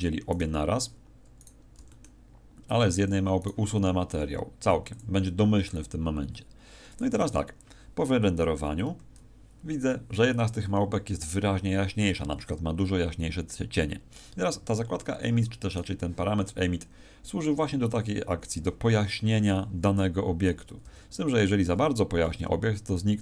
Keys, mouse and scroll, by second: 0.3 right click, 1.6 right click, 1.7 g, 3.0 click, 3.4 right click, 4.9 click, 14.5 Escape, 15.7 right click, 20.4 r.